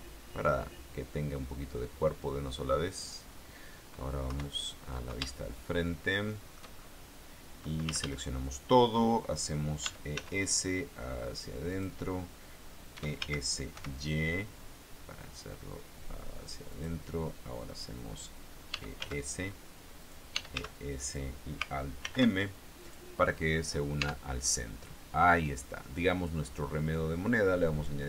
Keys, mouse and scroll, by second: 3.1 click, 4.4 KP_1, 5.4-6.9 shift+middle drag, 8.1 a, 10.0 e, 10.3 s, 11.9 click, 13.1 e, 13.4 s, 13.9 y, 16.9 click, 18.9 e, 19.2 s, 20.2 click, 20.5 e, 20.7 s, 21.2 click, 22.2 alt+m, 23.0 click, 23.7 scroll down 1, 24.1 Tab, 24.8-25.1 scroll up 1, 25.4 scroll down 2, 26.9 middle click.